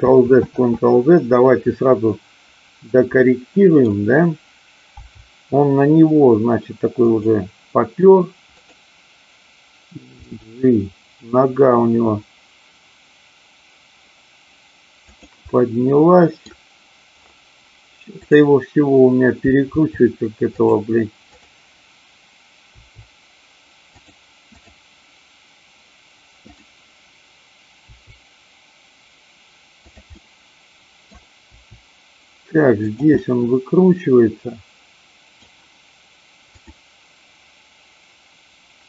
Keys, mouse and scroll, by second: 3.2 middle click, 4.9 g, 7.0 click, 8.6 click, 10.1 g, 15.1 click, 15.5-16.5 middle drag, 18.1-19.1 drag, 19.7 r, 20.5 click, 21.2-22.2 drag, 22.7 r, 24.0 click, 24.5-25.5 drag, 26.3-27.3 drag, 27.7 r, 29.9 click, 30.1 middle click, 31.5 r, 32.9 click, 33.2-35.3 middle drag.